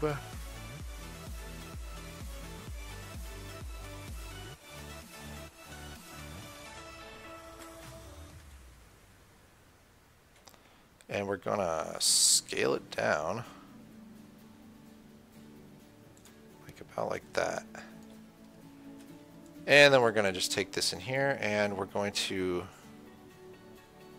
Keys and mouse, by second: 1.4 click, 1.8-3.2 right drag, 6.7 KP_1, 7.9 KP_3, 12.6 s, 17.5-19.5 drag, 19.8-24.1 drag.